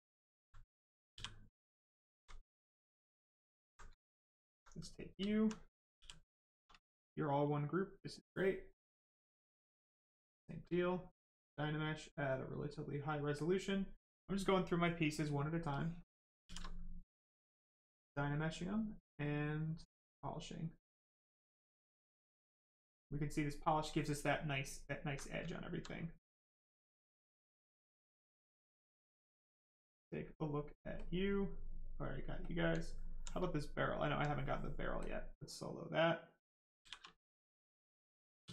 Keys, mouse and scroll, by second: 0.0 alt+right click, 2.5 click, 3.1 alt+right click, 4.7 right click, 4.8 right click, 5.2 alt+right click, 5.8 shift+right click, 5.9 shift+f, 6.7 right click, 8.6 click, 11.1 click, 13.3 click, 15.7 click, 16.4 shift+f, 17.1 click, 20.0 click, 22.8 right click, 24.3 alt+right click, 25.9 right click, 26.0 right click, 26.5 alt+right click, 27.7 right click, 27.8 right click, 28.5 alt+click, 29.0 right click, 30.9 click, 31.3 right click, 32.4 click, 32.8 alt+right click, 33.9 alt+click, 35.5 right click, 36.8 shift+f, 37.1 right click, 38.4 ctrl+w.